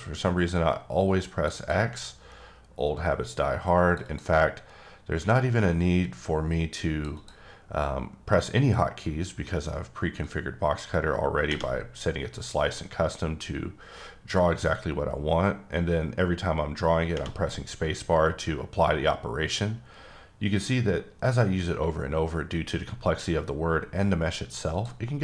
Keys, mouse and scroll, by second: 0.5 click, 1.5 double click, 2.9 click, 4.0 double click, 6.0 click, 7.1 double click, 10.2 click, 15.7 click, 24.7 click.